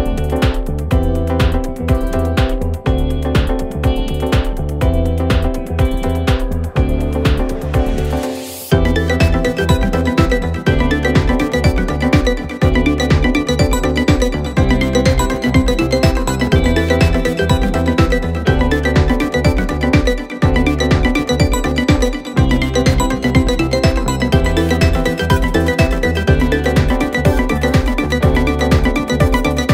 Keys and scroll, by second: 4.5 Escape, 6.6 Delete, 10.8 ], 15.0 ctrl+F1.